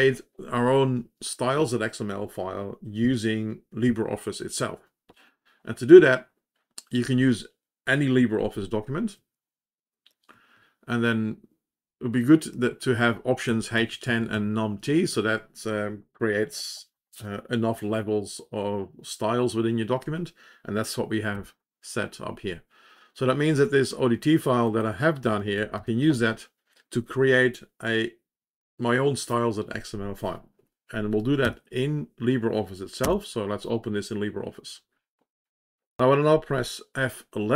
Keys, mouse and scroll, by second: 24.6 click, 25.5 Up, 25.7 Up, 31.5 &.